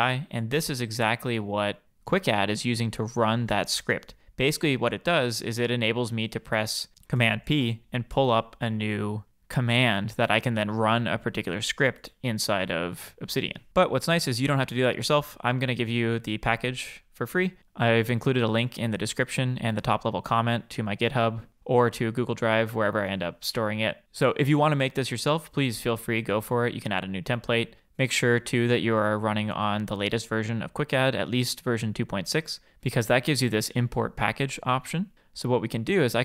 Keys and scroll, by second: 7.2 super+p.